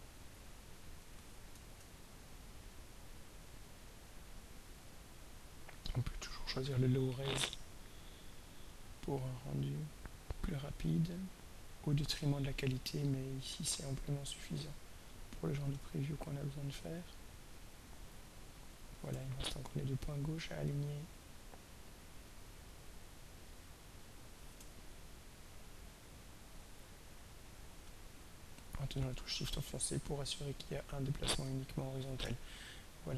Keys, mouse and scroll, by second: 1.0 click, 1.9-2.6 ctrl+scroll down 1, 2.9-3.7 scroll down 1, 5.8 click, 10.8 click, 13.5-14.5 drag, 15.6 click, 19.6-19.9 ctrl+scroll down 2, 20.4-21.2 ctrl+scroll up 5, 22.0-23.5 drag, 24.9-26.1 ctrl+scroll up 2, 27.7-30.9 drag, 32.7-33.1 ctrl+scroll down 2.